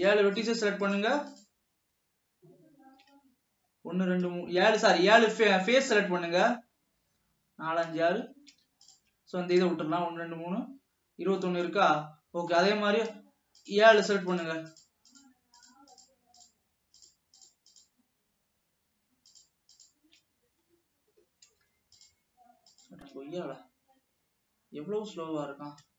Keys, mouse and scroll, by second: 0.1 shift+click, 0.5 shift+click, 0.9 shift+click, 1.4 shift+click, 8.9-9.2 ctrl+drag, 11.6 scroll down 2, 11.9-13.1 middle drag, 13.1 scroll up 2, 13.7-14.8 shift+drag, 15.3 shift+click, 15.8 shift+click, 16.6 shift+click, 17.2 shift+click, 19.4 shift+click, 23.5 shift+click, 23.9 shift+click.